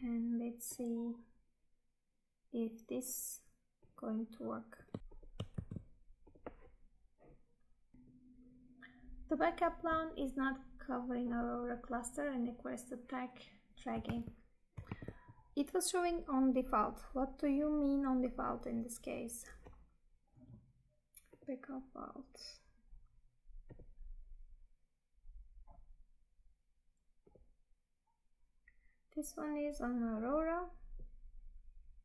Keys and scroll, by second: 5.4 ctrl+v, 14.2 Tab.